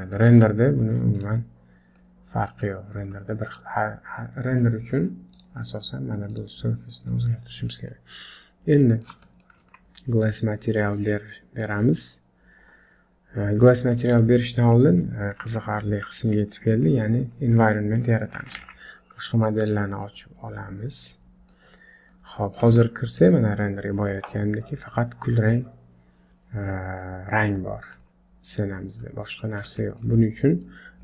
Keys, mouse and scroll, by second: 0.5 z, 2.1 middle click, 3.1 z, 3.9-5.1 scroll up 1, 5.4 click, 6.3 click, 6.8 scroll down 3, 7.1 scroll up 1, 7.9 middle click, 7.9 scroll up 3, 8.9 middle click, 9.3 shift+middle click, 9.9 z, 10.7-11.4 scroll down 2, 11.4 middle click, 14.2 scroll down 1, 18.7 alt+h, 19.1 scroll down 3, 19.3 middle click, 19.7 click, 20.1 middle click, 21.7 scroll up 3, 22.2 scroll down 3, 22.4 middle click, 22.7 z, 29.0-29.4 scroll up 3, 29.4 middle click, 29.8 shift+middle click.